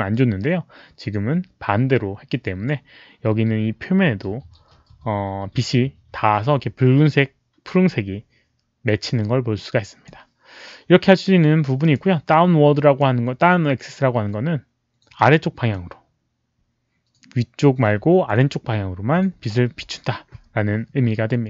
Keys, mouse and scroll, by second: 9.5-10.0 drag, 11.8 click, 12.7 click, 15.1 click, 19.4 click, 19.4 z, 19.6 click.